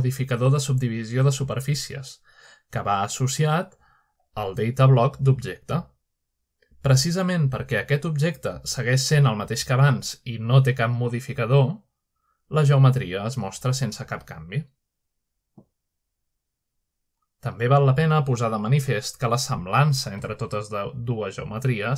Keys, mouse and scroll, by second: 0.0-1.0 drag, 5.2-6.0 drag, 7.4 click, 8.8 click, 13.1 click, 14.2 click, 15.8-18.6 drag, 18.6-18.9 scroll down 1, 19.3-20.0 middle drag, 20.5-21.5 shift+middle drag, 21.5-21.9 scroll down 2.